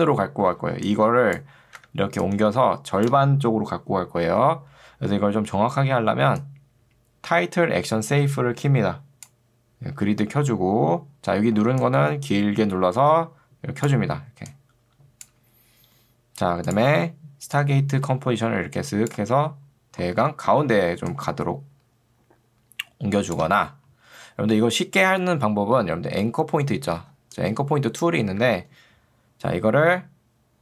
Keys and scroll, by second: 0.6 ctrl+2, 1.8 Escape, 4.4 ctrl+z, 27.0 ctrl+2, 28.4 Escape.